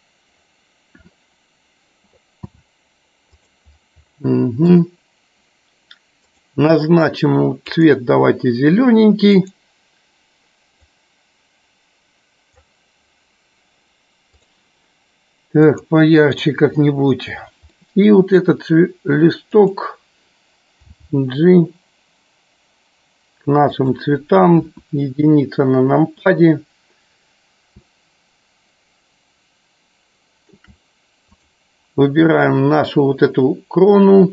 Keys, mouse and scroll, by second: 3.4 click, 4.0 middle click, 6.2 click, 14.2 click, 16.4 click, 18.1 middle click, 20.0 click, 24.3 click, 25.4 KP_1, 28.3-31.4 shift+middle drag, 31.6 click.